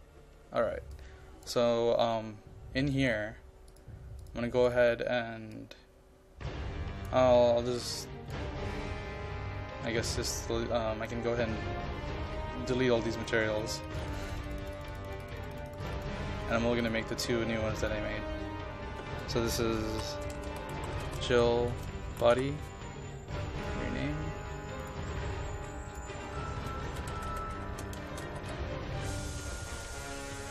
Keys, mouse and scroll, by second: 20.0-22.9 typing, 23.7 click, 26.7-29.1 typing, 29.6-30.5 drag.